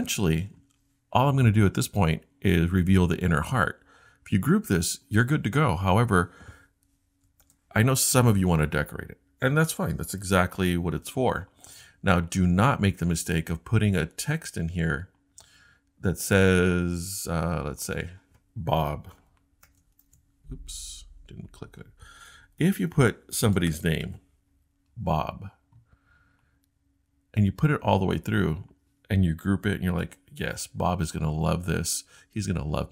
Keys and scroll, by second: 7.4 super+g, 19.2 shift+Return, 19.6 b, 22.5 Delete, 22.6 Delete, 22.7 Delete, 30.0 super+g.